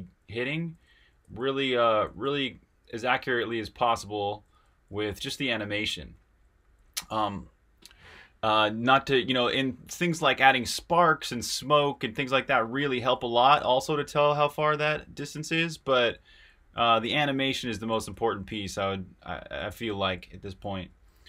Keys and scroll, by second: 0.0-21.2 typing.